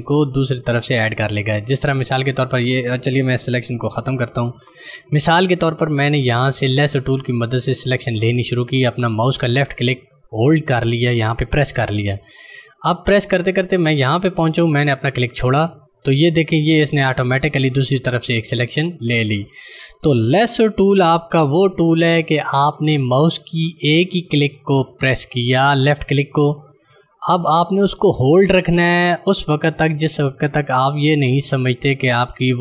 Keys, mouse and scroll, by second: 4.4 ctrl+d, 8.2 click, 20.8 ctrl+d, 26.1 click.